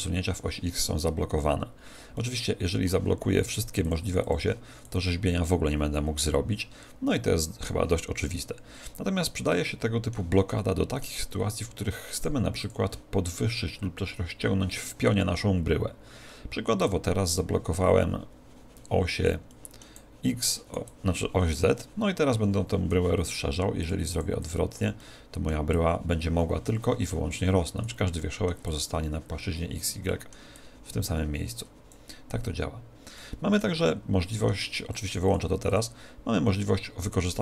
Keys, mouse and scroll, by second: 2.1-3.8 middle drag, 3.8-6.6 drag, 9.5-12.1 middle drag, 12.1-14.4 drag, 16.8 click, 19.5-21.3 middle drag, 19.9-22.7 drag, 23.7-27.5 drag, 24.9-26.8 middle drag, 28.1-29.8 middle drag, 28.6-32.3 drag, 30.0-31.7 middle drag, 33.1-35.2 middle drag, 35.2-37.4 drag, 35.3 middle click, 35.5 middle click, 37.3-37.4 middle drag.